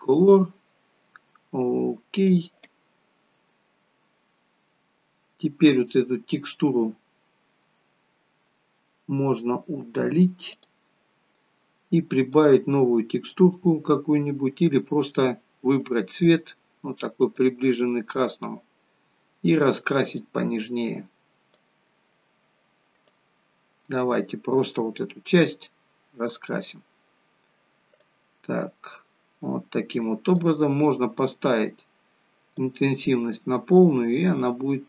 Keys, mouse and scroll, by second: 3.2-3.8 scroll up 2, 4.4-5.0 scroll up 1, 5.0 scroll down 1, 6.0-6.9 scroll down 11, 6.9-9.2 scroll down 3, 10.6 click, 12.3 click, 15.7 click, 18.2 click, 21.9 middle click, 23.1 click, 26.7 middle click, 28.0 click, 31.5 click, 33.3 click.